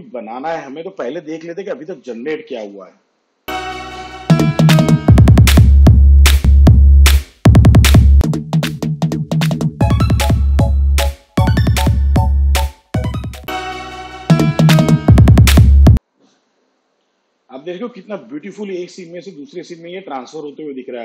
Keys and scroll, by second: 2.5 space.